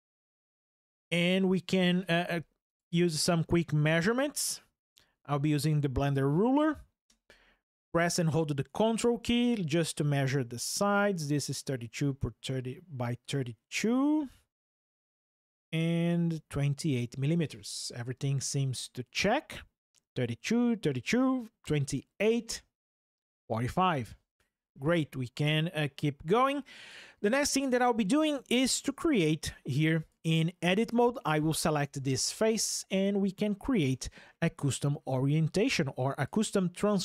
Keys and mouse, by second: 0.5 ctrl+alt+o, 2.5 drag, 10.0 ctrl+drag, 12.9 ctrl+drag, 18.6 middle click, 21.7 middle click, 26.6 click, 28.1 Tab, 29.8 click, 30.5 click, 36.0-37.0 drag.